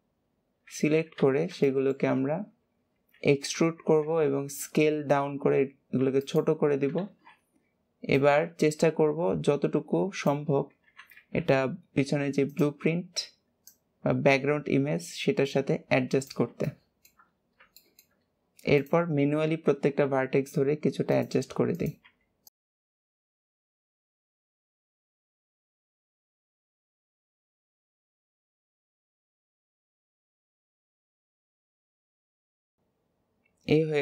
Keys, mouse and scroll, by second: 0.4-1.1 scroll down 2, 1.1 alt+z, 1.6 shift+middle click, 2.1-2.8 scroll up 2, 3.1 e, 8.0 click, 10.7 s, 13.6 click, 16.5 shift+middle click, 17.3 scroll up 2, 17.7 shift+middle click, 18.1-18.7 scroll up 2, 18.7 click, 19.0 scroll up 1, 21.7 click, 22.6 shift+middle click, 22.8 click, 22.9 g, 23.2 shift+middle click, 23.4 g, 23.7 shift+middle click, 23.9 click, 24.3 shift+middle click, 24.6 click, 24.8 g, 25.3 scroll down 1, 25.4 shift+middle click, 25.5 scroll up 1, 25.7 click, 25.8 g, 26.2 click, 26.6 shift+middle click, 26.8 click, 26.9 g, 27.2 shift+middle click, 27.4 click, 27.9 shift+middle click, 28.1 click, 28.6 shift+middle click, 28.8 click, 29.3 shift+middle click, 29.7 click, 30.2 shift+middle click, 30.5 click, 30.6 g, 31.2 click, 31.6 click, 31.9 scroll down 1, 32.2 middle click, 32.5 alt+z, 32.5-34.0 middle drag.